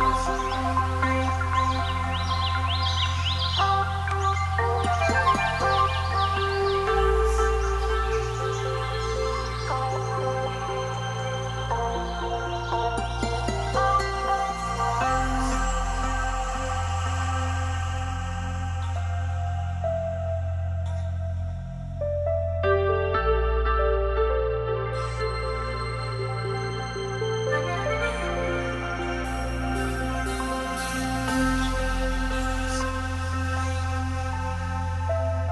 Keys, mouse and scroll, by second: 2.7 click, 3.4 click, 3.7-4.2 scroll, 4.2 click, 4.4 click, 5.3 x, 6.7 click, 8.7 click, 9.9 Right, 12.1 click, 12.6-13.6 scroll down 9, 13.6-14.1 scroll, 13.6 x, 14.3-14.7 scroll up 4, 14.7 x, 15.1-15.5 scroll up 2, 16.3 click, 17.1 m, 18.1 click, 18.5 Right, 19.4 click, 20.7-22.4 scroll, 23.0 Escape, 23.8 click, 24.8 d, 27.3 middle click, 27.3 middle click, 28.0 middle click, 28.0 o, 29.2 click, 29.8 click, 30.4 click, 31.9 click, 33.8 click, 35.4 click.